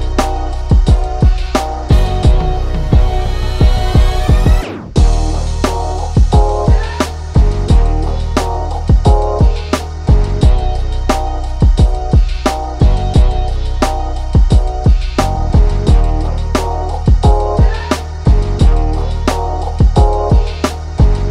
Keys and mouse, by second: 10.0 KP_1, 14.4 2, 15.2 click, 16.1-21.3 ctrl+middle drag.